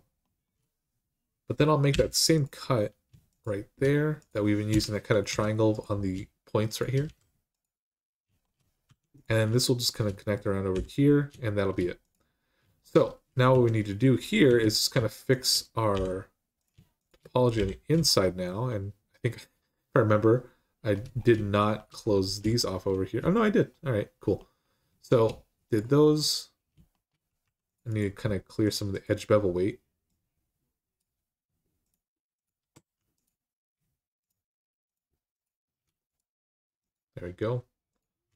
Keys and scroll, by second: 1.7 k, 4.5 Return, 5.1 Return, 6.8 typing, 8.6 1, 10.5 j, 13.3-14.3 typing, 15.7 j, 17.3 j, 27.2 2.